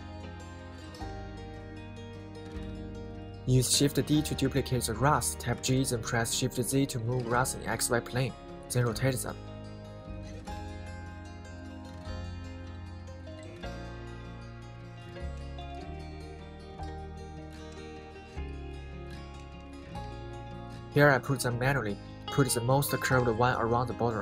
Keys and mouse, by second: 0.9 middle click, 2.2-3.1 right drag, 3.2 middle click, 4.4 shift+d, 5.4 shift+z, 9.8-11.8 middle drag, 11.9 middle click, 12.7 middle click, 13.7-14.3 middle drag, 14.7 shift+d, 15.4 shift+z, 17.3 right click, 17.7 middle click, 18.3 r, 18.5 z, 20.0 right click, 20.5 middle click, 21.6 middle drag, 22.5 click, 23.9 shift+d.